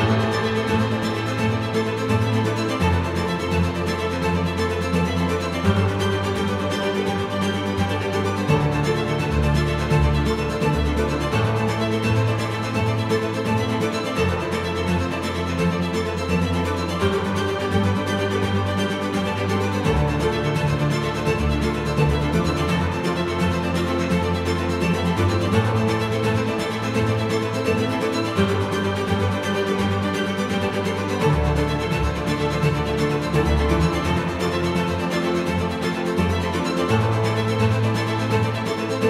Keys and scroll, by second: 14.7 ctrl+F4.